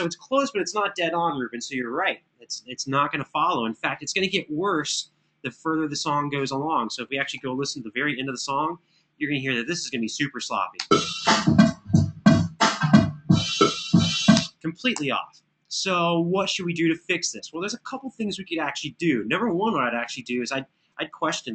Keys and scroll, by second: 7.1 Right, 8.2 super+[, 12.6 space, 14.7 Return, 14.7 space.